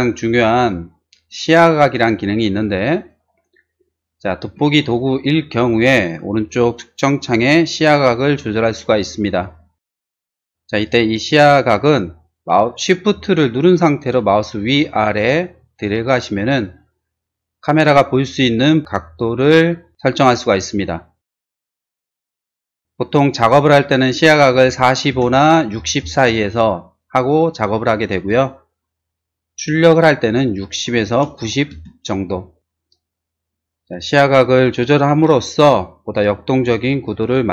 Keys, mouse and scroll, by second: 0.5 click, 1.3 click, 3.1 click, 4.4 z, 14.7 shift+middle click, 15.4 shift+click, 15.4 shift+right click, 15.7 shift+click, 15.7 shift+right click, 16.0 shift+click, 16.0 shift+right click, 17.0 shift+click, 18.3 shift+click, 19.2 shift+click, 19.3 shift+click, 21.8 shift+middle click, 22.0 shift+middle click, 22.7 shift+middle click, 24.5-26.2 typing, 25.1 Return, 26.3 Return, 31.0 typing, 31.7 Return.